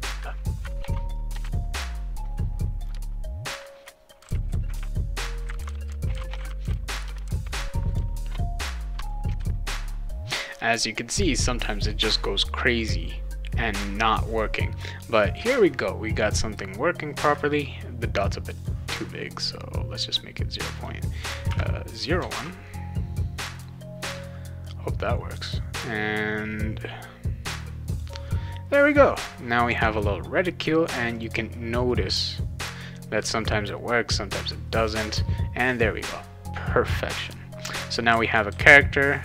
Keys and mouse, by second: 0.1 click, 0.3 click, 1.1 click, 1.3 BackSpace, 1.5 click, 2.2 click, 2.9 Return, 3.1 click, 3.5 click, 3.6-7.8 typing, 8.2 click, 9.1 click, 9.3 BackSpace, 9.4 ctrl+s, 9.5 click, 10.0-12.6 drag, 17.3 Return, 18.6 click, 20.7 click, 21.5 0, 22.3 ctrl+s, 23.5 click, 27.9 click, 31.1 click, 32.6 click, 35.0 click, 38.1 w, 38.5 w.